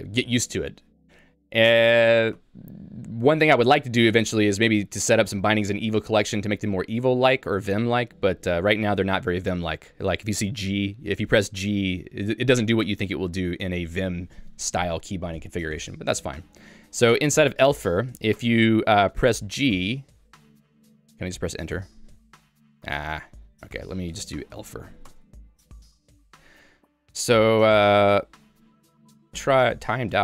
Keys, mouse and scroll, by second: 2.6 ctrl+u, 3.3 ctrl+d, 10.0 j, 10.7 shift+v, 11.9 Escape, 18.4 Return, 21.0 Return, 23.0 q, 25.4 Return.